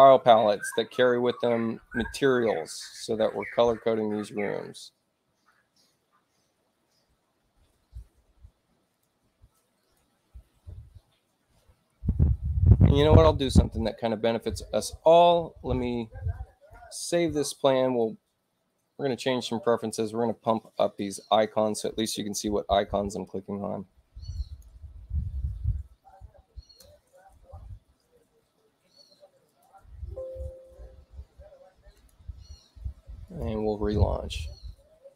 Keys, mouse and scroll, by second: 8.9 click, 9.8 click, 12.8 click, 14.2 click, 16.3 click, 19.7 click, 20.7 click, 24.3 click, 27.0 8, 29.4 click, 31.9 click, 33.2 click.